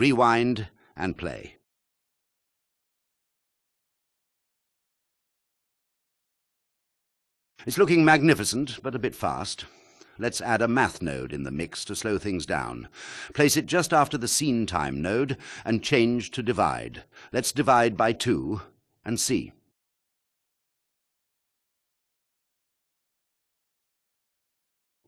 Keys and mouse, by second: 3.0 click, 7.5 KP_1, 12.2 click, 14.3 click, 15.6 shift+a, 17.8-19.6 drag, 20.1-21.7 drag, 22.8 click, 23.3 click.